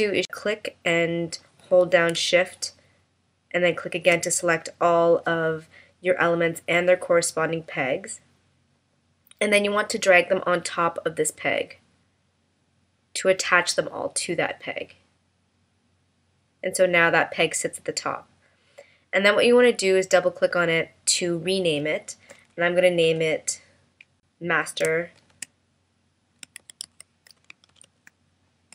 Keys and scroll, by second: 23.1 BackSpace.